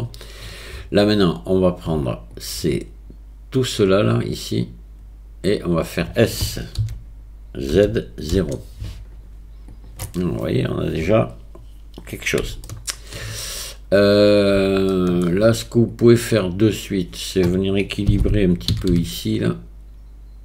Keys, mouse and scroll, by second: 6.8 s, 12.7 shift+middle click, 12.8 shift+click, 14.9 shift+click, 15.9 click, 16.7 click, 18.7 g.